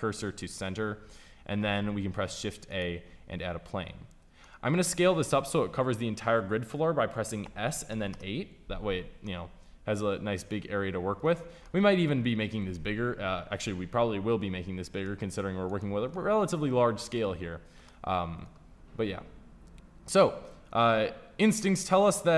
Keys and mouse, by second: 0.9 middle click, 1.5 shift+a, 7.3 s, 14.8 middle click, 17.4 middle click.